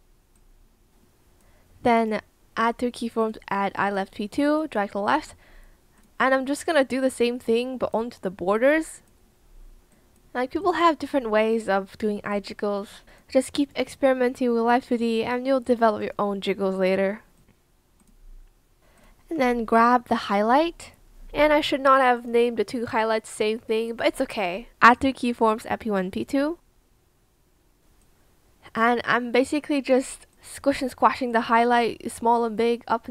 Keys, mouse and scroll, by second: 32.5 shift+click.